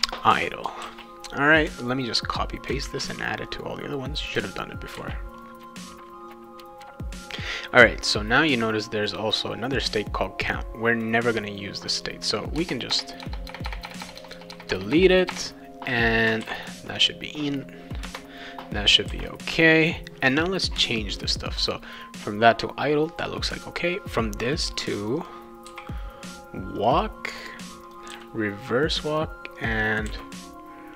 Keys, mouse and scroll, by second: 0.8 ctrl+s, 1.6-2.7 drag, 2.8 ctrl+c, 3.5 click, 5.0 ctrl+v, 5.4 click, 5.7 click, 6.3 BackSpace, 6.4 click, 6.6 ctrl+v, 6.6 click, 6.8 ctrl+v, 9.7 click, 11.0-12.0 drag, 12.6-15.3 typing, 16.4 ctrl+s, 16.9 click, 18.0 Return, 19.1 ctrl+s, 25.0 click, 25.2 click, 25.6 w, 26.8 click, 26.9 click, 27.6 click, 27.8 click, 28.1 r, 28.9 click, 29.1 click, 29.6 click, 29.7 click, 30.1 r.